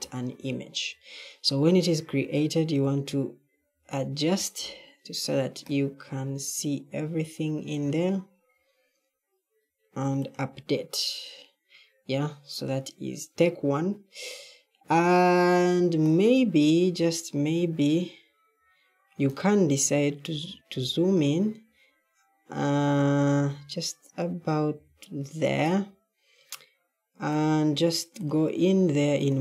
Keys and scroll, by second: 2.8 a, 3.4 a, 20.2 w, 20.6 w, 23.3 s, 24.6 w.